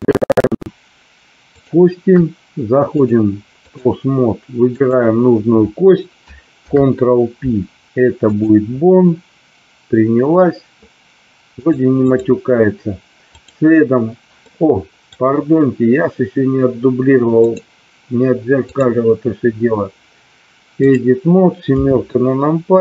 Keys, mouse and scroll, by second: 1.5 shift+click, 3.1-3.8 drag, 4.8 click, 6.5 ctrl+p, 11.7-12.3 drag, 13.4 click, 14.4 middle click, 17.3 click, 18.5-21.0 drag, 21.7 KP_7.